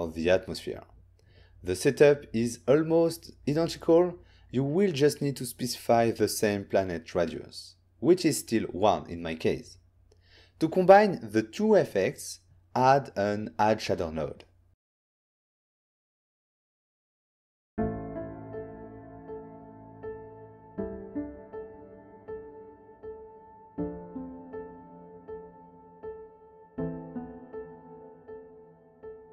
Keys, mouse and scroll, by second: 1.2 click, 1.7-2.1 typing, 2.6 Return, 6.0 click, 10.7 click, 11.7 click, 11.8 click, 11.9 shift+a, 12.4 click, 12.9-13.2 typing, 14.9 click, 15.4 click, 15.5 click, 15.6 alt+right click, 15.9 alt+right click, 16.4 click.